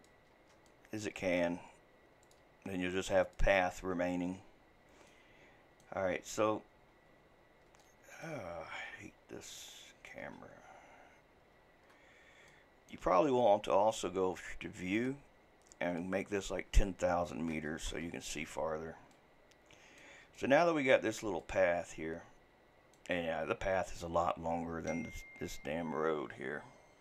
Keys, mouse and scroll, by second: 0.7 shift+middle click, 1.4 e, 2.4 e, 4.3-5.1 scroll down 5, 5.1-6.2 middle drag, 6.2-6.9 scroll down 1, 6.9-7.4 scroll up 7, 7.4 scroll down 2, 7.8 shift+middle click, 8.5-9.6 scroll down 9, 9.6 shift+middle click, 10.3-11.1 scroll up 10, 11.1-11.8 scroll down 4, 11.8-12.5 scroll up 2, 12.5-14.9 shift+middle drag, 14.9 click, 15.9-18.7 drag, 18.7-19.1 scroll down 1, 19.1-24.3 middle drag, 24.3-27.0 scroll up 1.